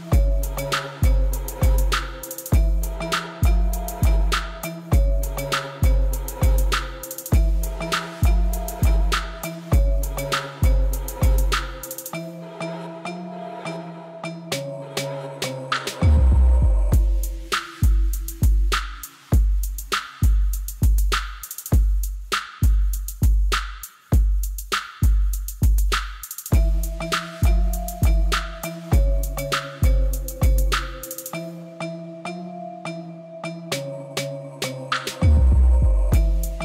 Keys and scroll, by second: 7.5 ctrl+shift+Left, 8.6 t, 8.7 e, 9.0 n, 10.1-11.8 typing, 17.4 Tab, 18.1 ctrl+r, 18.9 Return, 19.8 3, 21.5 i, 24.4 a, 24.8 e, 25.0 z, 26.9 e, 27.9 2, 29.3 ctrl+b, 33.0 3, 33.4 ctrl++.